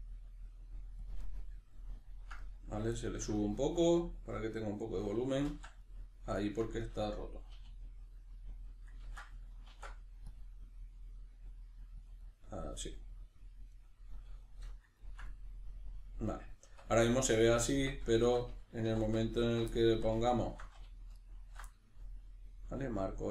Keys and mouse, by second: 1.1 click, 1.7 ctrl+middle click, 4.2-5.5 middle drag, 5.5 ctrl+z, 6.8-19.3 middle drag, 7.6 e, 8.6 click, 9.0 ctrl+z, 12.1 click, 16.6 Tab, 17.8 Tab, 18.8 2, 19.3 alt+right click, 19.7-20.3 middle drag, 20.3 alt+shift+right click, 21.1 alt+shift+right click, 21.7-23.3 middle drag.